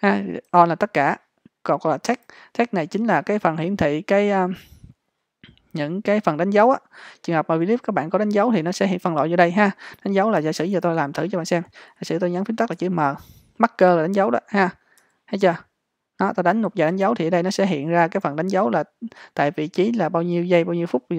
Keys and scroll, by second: 12.8 m.